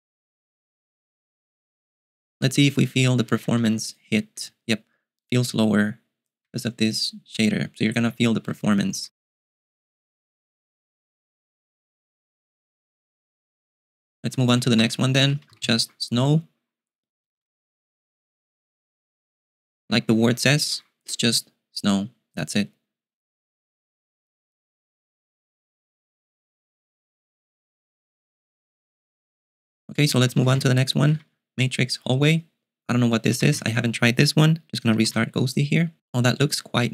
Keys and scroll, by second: 3.1-8.4 typing, 14.3-16.1 typing, 17.6 super+q, 30.1-31.1 typing, 33.0-34.1 typing, 35.3 super+q.